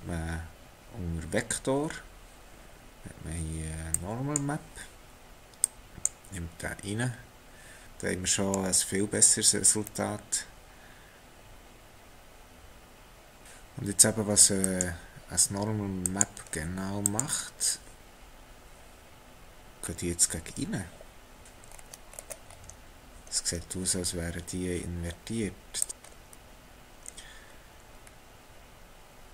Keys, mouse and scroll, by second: 8.5 middle click, 13.4 middle click, 14.0 click, 16.4 click, 18.8 scroll up 4, 19.8-20.1 scroll up 3, 21.6-23.3 scroll down 9, 23.3-25.8 scroll up 3, 25.8 click, 26.0-26.5 scroll up 3, 27.2-27.9 scroll up 2, 27.9-29.3 scroll up 2.